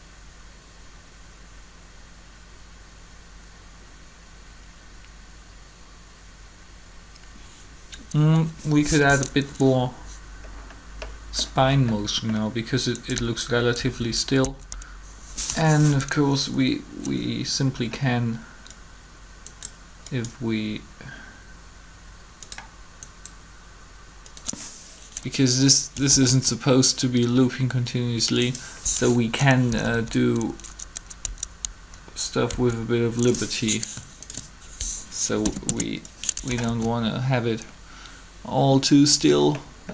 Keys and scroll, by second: 13.0 Up, 13.8 Up, 15.5 3, 26.1 alt+a, 29.7 Up, 29.9 Up, 32.5 Down, 35.3 shift+Delete, 35.6 Return, 36.7 alt+a.